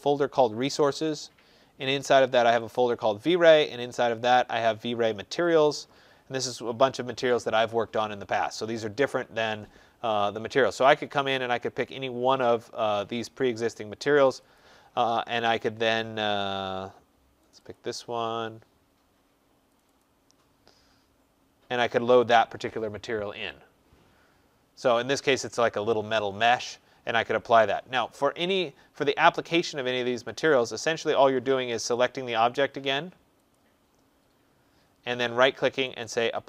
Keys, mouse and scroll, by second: 0.9 click, 1.1 click, 2.5 click, 2.8 click, 5.3 click, 5.5 click, 13.0 middle click, 13.1 middle click, 14.2 click, 14.4 click, 17.4 click, 17.6 click, 19.7 click, 19.9 click, 30.1 click, 31.8 click, 33.6 click, 34.0 click, 35.8 click, 35.9 click, 35.9 right click.